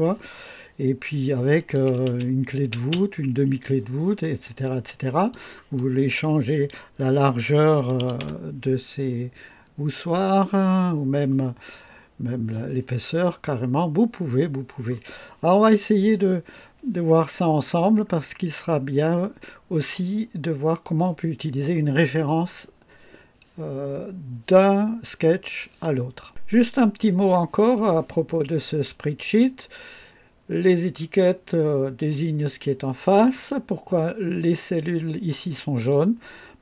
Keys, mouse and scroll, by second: 1.6 click, 2.1 space, 2.8 space, 5.2 click, 7.8 KP_2, 8.0 KP_0, 8.2 Return, 26.5 click, 33.3 click.